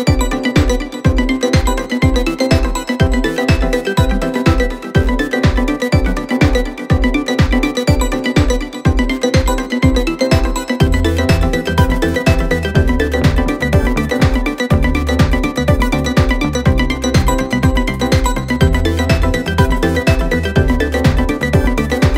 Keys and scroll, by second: 13.3 2, 15.9 ], 17.0 4, 20.1 3.